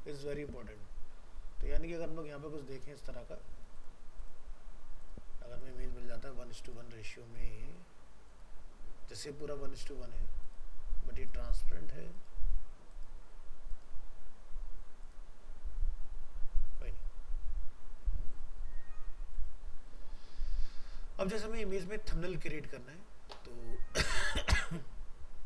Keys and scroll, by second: 21.9 ctrl+w.